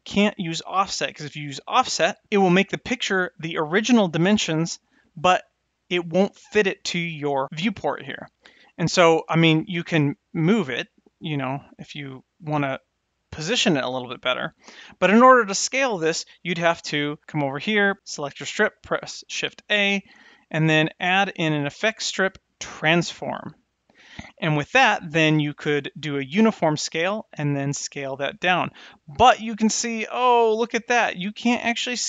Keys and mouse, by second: 9.1 click, 9.7-12.5 drag, 17.9 click, 19.4 shift+a, 26.6 click, 27.6 click, 28.2-29.7 drag.